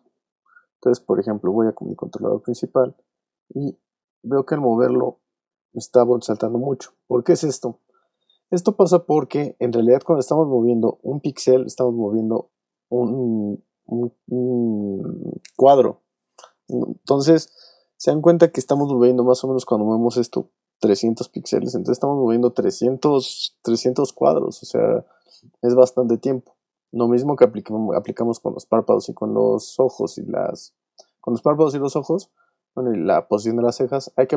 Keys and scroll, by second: 7.8 super+z, 26.8 super+z.